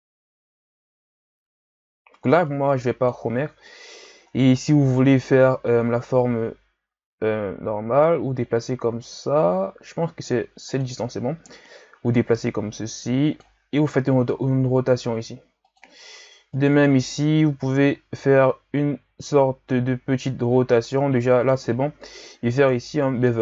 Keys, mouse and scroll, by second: 3.4-4.3 scroll up 6, 4.3-5.4 scroll down 1, 5.4 e, 11.5-13.8 drag, 13.8 r, 16.6 alt+right click, 17.5 r, 22.6 ctrl+b.